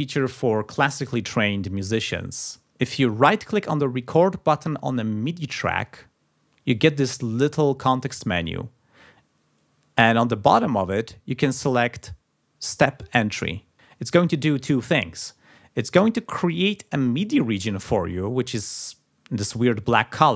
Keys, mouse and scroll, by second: 2.8 scroll down 2, 5.7 right click, 12.6 click, 15.2-16.7 drag.